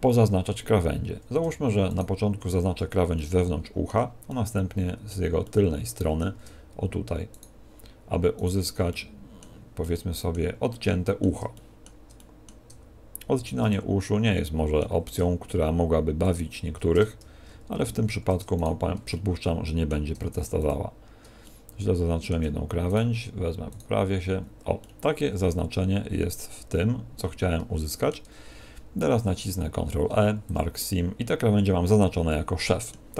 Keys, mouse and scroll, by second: 0.1-0.5 scroll up 5, 0.7 a, 1.8 alt+shift+right click, 3.1 middle click, 4.2 middle click, 7.3 alt+shift+right click, 8.3 alt+shift+right click, 8.9 middle click, 9.7 middle click, 11.5 shift+middle click, 12.1 middle click, 13.6 middle click, 16.1 alt+shift+right click, 17.7 z, 18.5 shift+right click, 19.0 middle click, 20.1 middle click, 20.7 shift+right click, 21.4 middle click, 22.8 shift+right click, 24.3-24.7 scroll down 4, 24.7 middle click, 29.7 ctrl+e, 32.2 middle click.